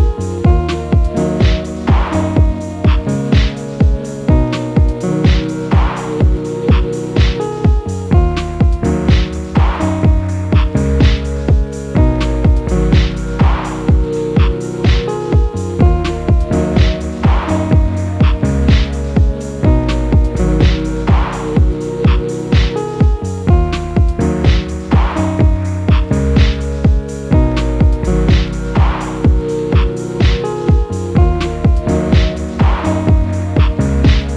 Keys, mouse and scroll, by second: 0.0 scroll up 2, 0.3 middle click, 0.8 g, 1.9-2.8 shift+middle drag, 2.8 Tab, 2.9-3.3 scroll up 3, 3.3-3.7 scroll down 1, 3.7 middle click, 4.0 s, 5.7-6.9 middle drag, 6.9 click, 8.7 click, 9.1 click, 10.1 a, 12.5 click, 13.7 click, 14.0 click, 14.4 click, 14.9 click, 15.8 a, 16.4 click, 17.7 click, 18.9 click, 19.4 a, 19.8 click, 21.0 click, 21.3 click, 22.2 click, 22.5 middle click, 23.2 a, 23.6 click, 24.3-25.8 middle drag, 26.0 click, 26.3 click, 26.8 click, 27.1-28.5 middle drag, 28.5 a, 28.9 click, 30.5 click, 31.1 click, 31.4-32.7 middle drag, 32.7 z.